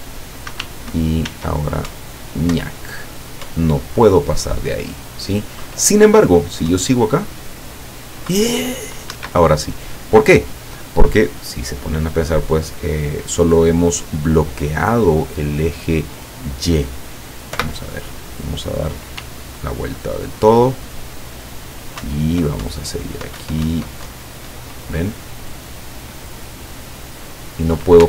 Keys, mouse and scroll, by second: 0.6 w, 1.4 s, 2.0 Up, 3.5 Up, 6.8 Up, 9.2 Escape, 17.6 p, 19.2 w, 22.1 Up.